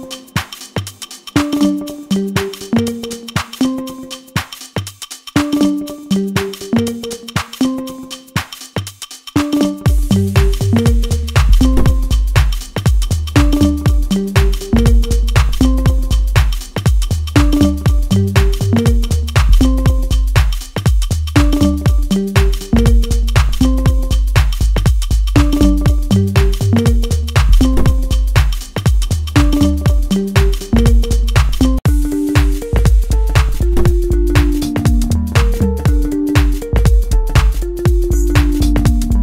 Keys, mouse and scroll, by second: 1.6-4.1 middle drag, 4.1-12.3 drag, 12.3-15.2 middle drag, 15.2 scroll down 1, 15.7-24.5 shift+middle drag, 24.8-30.9 drag, 31.4-33.0 middle drag, 33.0 click.